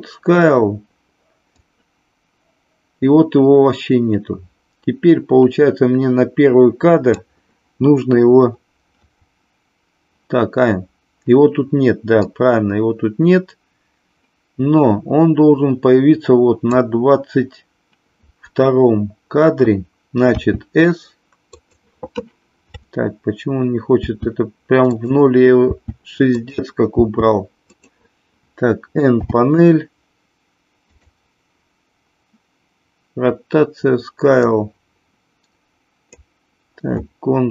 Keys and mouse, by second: 1.5-7.2 drag, 12.2-16.8 drag, 20.3 s, 21.5 click, 24.0 s, 24.9 click, 25.7 s, 26.3 click, 26.9 s, 27.5 click, 29.2 n, 34.6-36.2 drag.